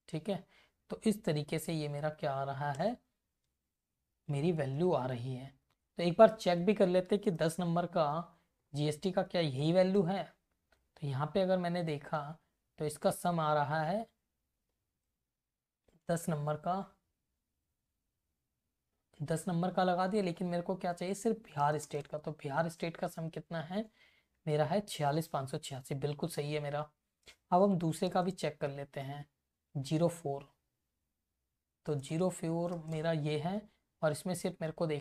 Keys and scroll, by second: 0.9 F2, 2.5 Return, 3.0 Up, 3.5 Left, 4.3 Up, 5.4 Down, 5.8 Right, 6.7 Up, 7.4 c, 7.9 Left, 9.0 Down, 9.3 e, 9.6 v, 11.0 Right, 11.9 Left, 12.4 Down, 14.7 Right, 15.5 Left, 15.8 Up, 19.7 Left, 20.2 alt+Down, 21.6 space, 22.4 Return, 22.7 Right, 25.7 Left, 26.8 Down, 27.9 Up, 28.2 space, 28.5 Return, 29.5 Right, 30.1 Down, 32.0 space, 32.9 Return, 33.7 Left, 34.1 Up.